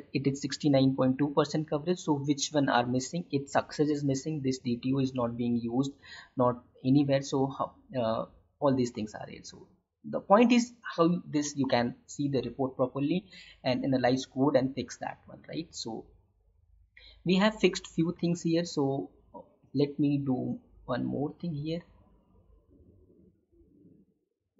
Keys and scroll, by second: 18.2 alt+Tab.